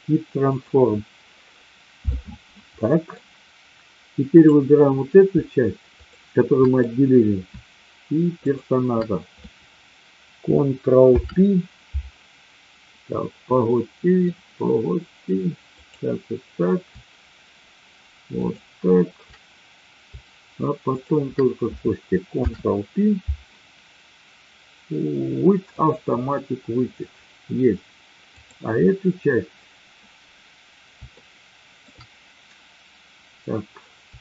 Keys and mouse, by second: 1.6 middle click, 2.7 middle drag, 4.4 click, 5.9 shift+click, 8.4 shift+click, 11.0 ctrl+p, 13.6-14.1 middle drag, 15.7 click, 18.4 shift+click, 22.4 ctrl+p, 28.4 click, 31.1-31.7 shift+middle drag.